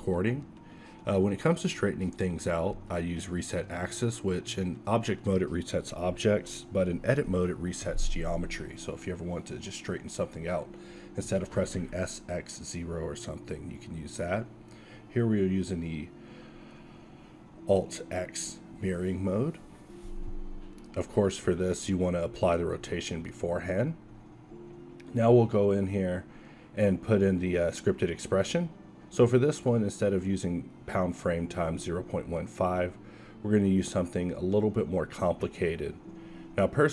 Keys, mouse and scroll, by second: 0.9 q, 2.9-5.7 drag, 3.4 s, 4.8 Tab, 6.3 r, 8.3 ctrl+a, 10.7 alt+x, 13.3-14.6 drag, 14.6 alt+x, 17.6-19.7 drag, 23.3 click, 23.6 n, 24.5 n, 24.6-27.6 drag, 27.7-29.6 drag.